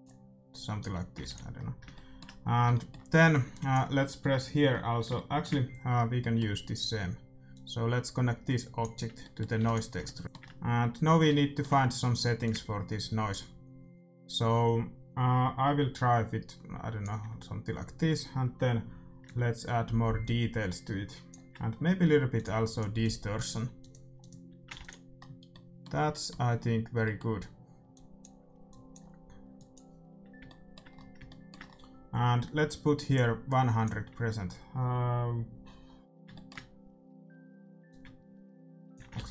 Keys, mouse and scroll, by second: 0.5-2.2 drag, 1.4 ctrl+s, 3.2-5.1 drag, 6.1-7.5 middle drag, 7.5-9.5 drag, 9.3-13.0 middle drag, 9.7 ctrl+s, 12.4-14.3 drag, 19.2-21.1 drag, 22.3-26.0 drag, 24.7 ctrl+s, 25.6-28.9 middle drag, 27.9-31.4 drag, 30.4 shift+w, 32.9-34.8 drag, 36.2-38.4 middle drag, 37.8-39.3 drag.